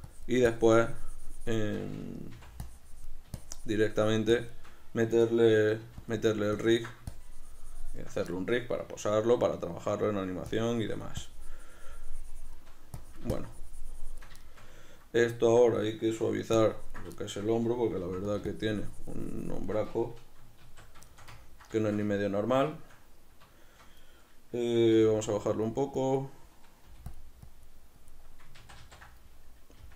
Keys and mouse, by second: 2.4 c, 5.9 f, 6.6-8.5 ctrl+drag, 8.5-10.6 shift+middle drag, 10.6-14.5 drag, 14.5-16.7 shift+middle drag, 16.7 ctrl+click, 17.3-18.5 shift+middle drag, 18.1 f, 18.6-21.2 shift+drag, 20.7 alt+q, 21.2-25.6 ctrl+shift+middle drag, 25.1 g, 25.6-27.2 drag, 27.0 f, 27.6-29.9 drag, 29.0 ctrl+z.